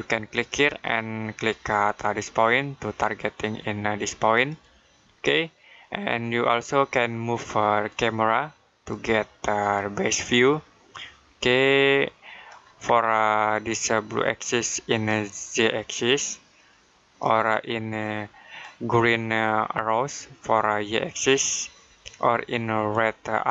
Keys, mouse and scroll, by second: 4.2 click, 7.7 click, 12.7-14.9 scroll down 1, 14.9 click.